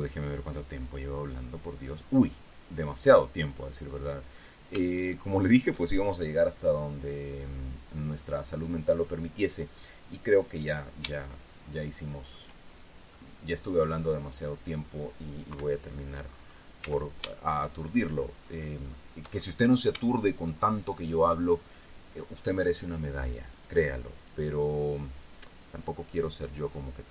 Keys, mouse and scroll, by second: 1.4 click, 3.6-5.3 drag, 5.4 shift+middle click, 6.8-7.9 scroll up 1, 7.9-9.3 scroll up 1, 9.3-10.6 scroll up 1, 10.6-11.2 scroll up 1, 11.2-11.6 scroll up 1, 11.6 shift+scroll down 2, 11.8-13.1 shift+middle drag, 13.7 middle click, 14.6-15.0 scroll down 2, 15.0 middle click, 16.1 3, 17.4-17.8 scroll up 1, 17.4 z, 17.9 shift+middle click, 18.8-19.5 shift+scroll up 1, 19.5-20.3 shift+scroll down 1, 20.3-20.7 scroll up 1, 20.7-21.8 shift+middle drag.